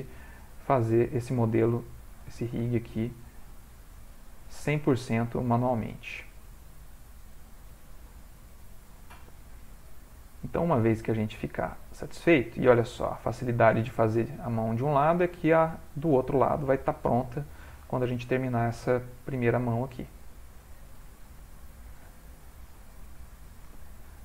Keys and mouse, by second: 0.2 g, 1.7 shift+click, 1.8 shift+click, 2.6 g, 4.9 click, 5.1 g, 6.6 click, 7.2 g, 8.3 middle click, 10.1 click, 11.3 click, 11.8 g, 12.9 click, 13.1 g, 15.0 click, 16.2 shift+click, 16.9 r, 17.5 g, 18.3 middle click, 19.5 click, 20.2 r, 20.9 r, 22.9 g, 23.7 ctrl+middle click, 24.0 ctrl+middle click, 24.1 middle click.